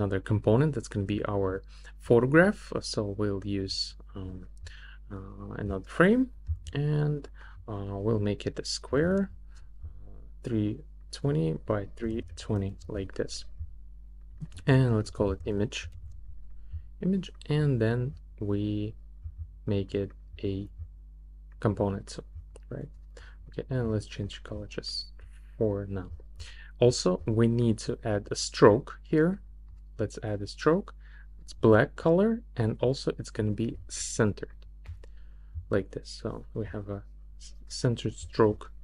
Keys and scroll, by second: 8.6-9.7 typing, 11.8-12.8 typing, 14.8-16.5 typing.